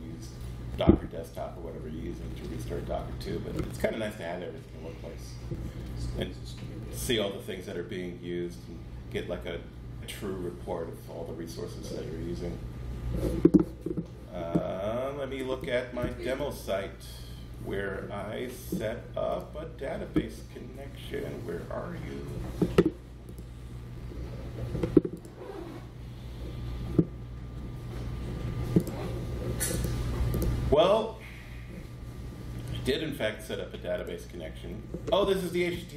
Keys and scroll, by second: 16.1 Page_Down, 16.1 Page_Up, 17.1 Page_Down, 17.2 Page_Up, 35.8 Page_Up.